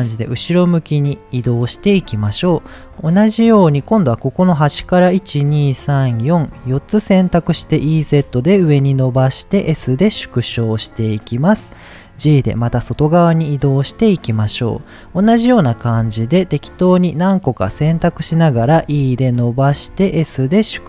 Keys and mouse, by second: 1.3 click, 1.7 middle click, 2.9 middle click, 4.2 click, 5.2-6.3 shift+drag, 6.6 middle click, 7.6 e, 9.3 click, 9.7 s, 10.6 click, 10.9 middle click, 14.0 click, 14.5 middle click, 16.2 shift+click, 17.1 shift+click, 17.5 shift+click, 17.9 middle click, 18.5 e, 19.5 click, 19.5 z, 19.9 s, 20.7 click.